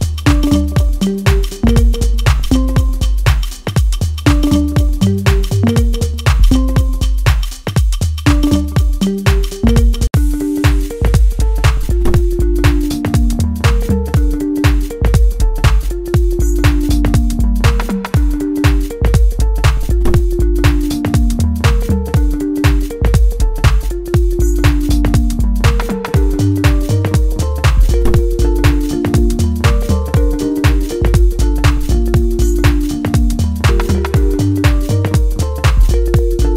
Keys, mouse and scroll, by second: 0.4-3.0 middle drag, 3.0 click, 6.0-10.4 middle drag, 12.0 click, 15.6 click, 15.8 ctrl+z, 16.2-21.2 drag, 21.2-22.6 middle drag, 22.6 click, 23.2-26.1 drag, 26.1-29.0 middle drag, 29.0-31.5 drag, 31.5-35.0 middle drag, 35.0 click, 36.2-36.5 middle drag.